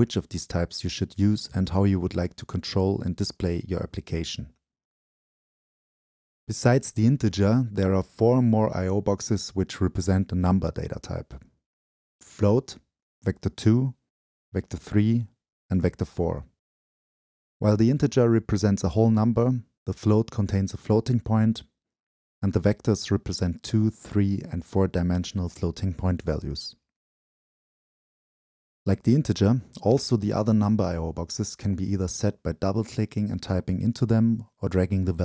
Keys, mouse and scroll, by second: 0.0-2.1 right drag, 3.1-3.9 scroll down 2, 3.9-6.0 drag, 6.0-6.7 right drag, 6.7-8.1 scroll down 2, 8.1 scroll down 1, 8.2-8.6 drag, 8.6-10.0 right drag, 12.5-13.4 drag, 14.3-15.1 drag, 17.1-22.0 drag, 22.0 ctrl+l, 23.0 ctrl+shift+l, 23.6-24.8 drag, 25.1-28.1 shift+drag, 33.4-35.2 right drag.